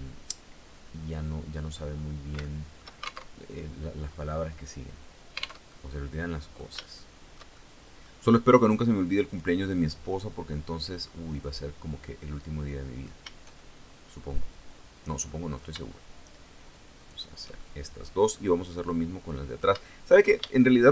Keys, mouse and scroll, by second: 2.0 shift+click, 2.8 alt+shift+Tab, 5.2 alt+Tab, 5.2-6.3 alt+drag, 6.4 shift+click, 6.4-7.8 shift+middle drag, 8.8 click, 11.0 right click, 11.6-12.6 middle drag, 12.6 scroll up 1, 13.1-15.4 shift+middle drag, 16.6 shift+right click, 17.2 shift+middle click, 18.3-19.3 middle drag, 20.0-20.9 shift+middle drag.